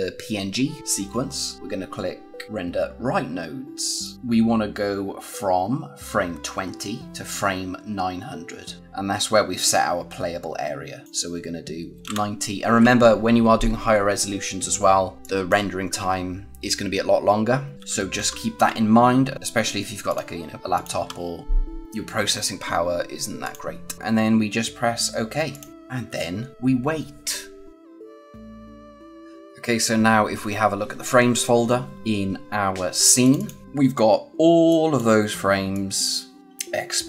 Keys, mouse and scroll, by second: 3.9 click, 8.8 click, 11.0 click, 15.2 click, 19.3 click, 23.3 click, 25.4 click, 28.4 click, 33.5 click, 35.7-37.0 drag.